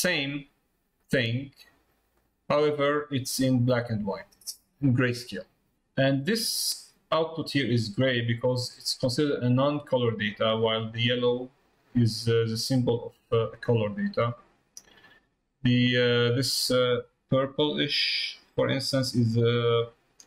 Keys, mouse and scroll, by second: 2.1-3.3 drag.